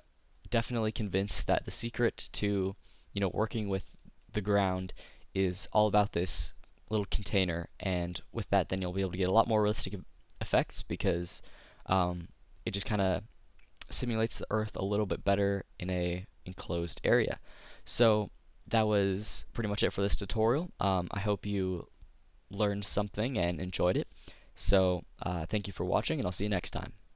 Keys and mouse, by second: 0.7-4.6 middle drag, 7.7 middle click.